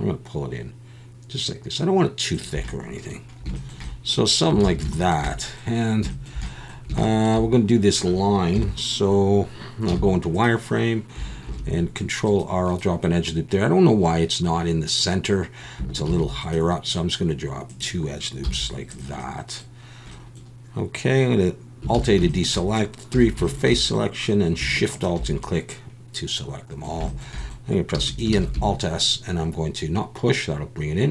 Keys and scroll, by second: 4.6 alt+a, 8.5 KP_1, 9.9 z, 11.4 ctrl+r, 16.1 ctrl+r, 18.4 z, 21.9 alt+a, 23.1 3, 27.9 e, 28.3 alt+s.